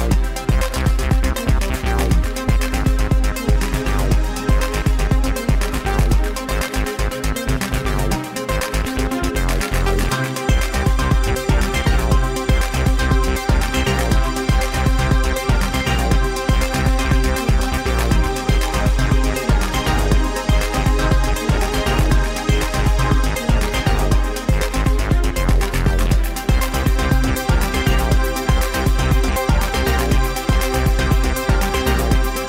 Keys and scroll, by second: 1.9 alt+z, 2.7 Escape, 4.3 alt+z, 7.3 Page_Up, 7.5 alt+z, 8.3 alt+z, 8.9 g, 12.9 alt+z, 13.2 Tab, 13.9 Page_Up, 18.2 z, 22.3 g, 22.8 z, 29.4 ctrl+z.